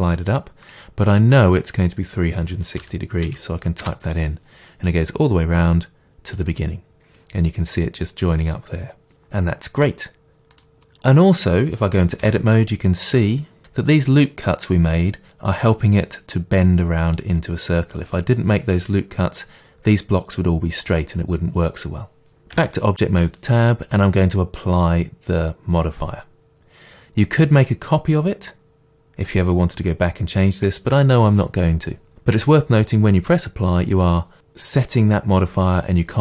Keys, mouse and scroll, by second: 3.9 Return, 4.9-7.0 middle drag, 7.0-9.6 drag, 9.6-36.2 middle drag, 12.2 Tab, 22.5 Tab.